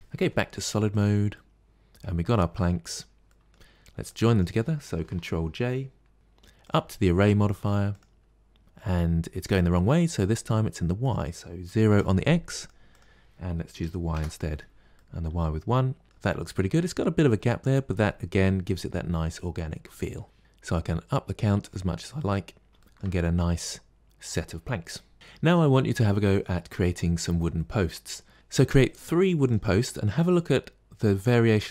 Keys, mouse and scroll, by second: 0.1 z, 1.2-2.7 middle drag, 2.7-3.1 scroll down 5, 3.1-3.9 middle drag, 3.9 drag, 6.1 ctrl+j, 6.5-9.5 drag, 10.9-12.5 drag, 12.8-14.8 drag, 14.8-16.0 middle drag, 21.5 click, 22.0-24.1 middle drag, 25.1-26.9 middle drag, 26.9-27.4 scroll up 1, 27.4-28.3 middle drag, 28.3 click, 29.3 click, 30.0 click, 30.9 click.